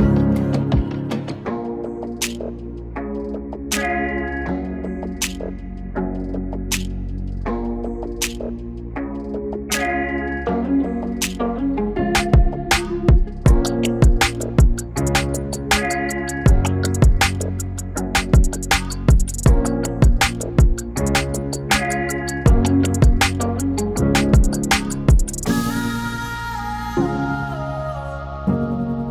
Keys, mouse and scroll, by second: 3.5 Return, 4.5 click, 5.5 space, 5.8 0, 6.9 click, 8.4 ctrl+d, 13.5-19.9 drag, 22.4-27.3 drag, 28.3-29.1 drag.